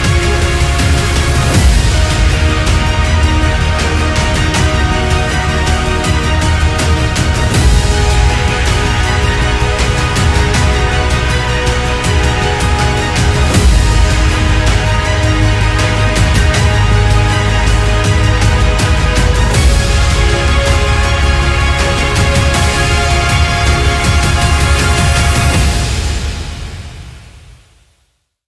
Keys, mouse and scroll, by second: 4.1 click, 6.6 click, 7.9 shift+middle click, 8.5-9.6 drag, 9.6 g.